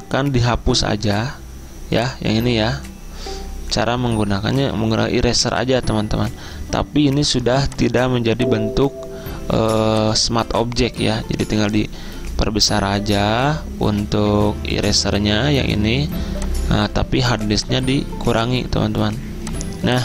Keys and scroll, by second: 4.7 e, 12.2-13.3 typing.